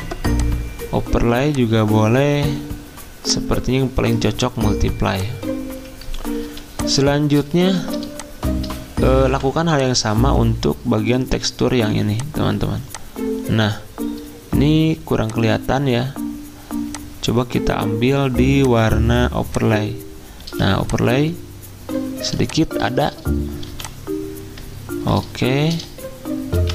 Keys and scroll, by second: 6.4 x, 7.6 ctrl+z, 9.3 v, 20.4 z, 22.9 v, 23.7 r, 25.7-26.7 typing.